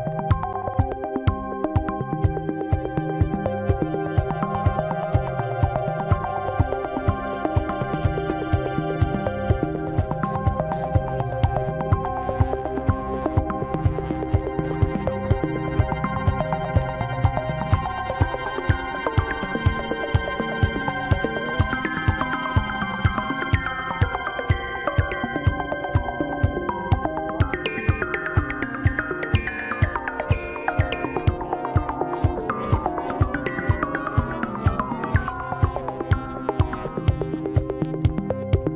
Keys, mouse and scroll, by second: 1.6 scroll down 4, 1.8-2.8 middle drag, 2.8-3.5 scroll up 2, 3.5-3.9 scroll up 1, 3.9 s, 6.3-7.5 middle drag, 7.6 scroll down 1, 7.8-8.5 middle drag, 8.5 scroll up 4, 8.8-10.0 middle drag, 10.2 g, 11.5 s, 13.2 g, 14.4-14.8 scroll down 4, 14.8-16.0 middle drag, 17.7 scroll up 2, 17.9 middle click, 18.6 scroll down 3, 18.8 shift+middle click, 19.0 Tab, 19.6 click, 19.8 scroll up 5, 20.3 middle click, 21.0 click, 21.7 alt+shift+click, 22.1-23.2 middle drag, 23.2 alt+shift+click, 24.1-24.4 scroll down 1, 24.4-26.0 middle drag, 26.0 click, 26.7-29.3 middle drag, 29.3-31.9 drag, 31.9-32.3 scroll down 1, 32.3-33.6 middle drag, 33.6 KP_1, 34.7-36.5 scroll up 4, 36.5 e.